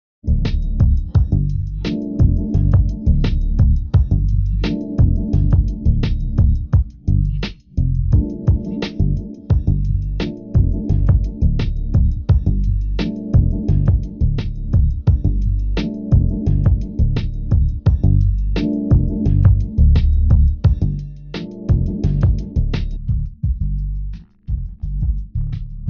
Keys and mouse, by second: 3.1 g, 4.7-6.3 drag, 6.3 g, 7.9-9.4 drag, 9.4 Tab, 16.5 Tab, 17.7 ctrl+Tab.